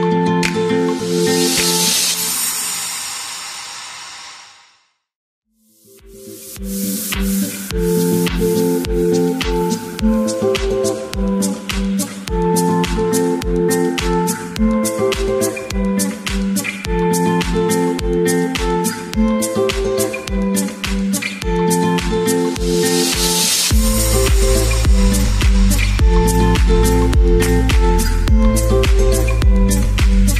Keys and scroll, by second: 1.1 space, 2.3 space, 6.3 space, 15.1-16.3 typing, 17.8-18.7 typing, 23.1-24.3 typing, 25.6 Page_Up, 25.7 Page_Up, 27.3-28.1 typing.